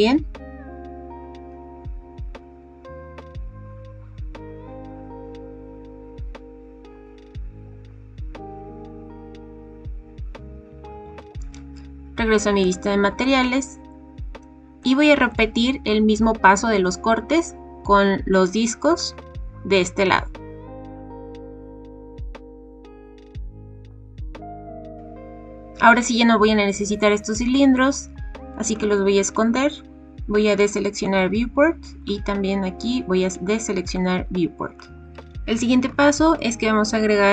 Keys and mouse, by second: 11.0 click, 13.2 drag, 13.2 middle click, 13.4 click, 13.5 middle click, 13.6 click, 13.7 middle click, 13.7 click, 13.8 middle click, 14.7 middle click, 18.3 click, 21.0 click, 22.2 click, 22.7 click, 22.9 click, 23.3 click, 28.7 click, 31.0 click, 33.8 click, 34.8 click, 35.8 shift+a.